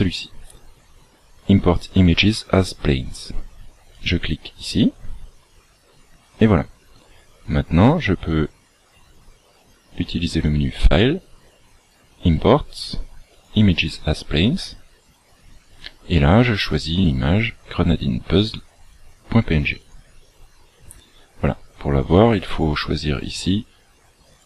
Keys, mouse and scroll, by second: 7.4 click, 19.9 click, 22.5 click.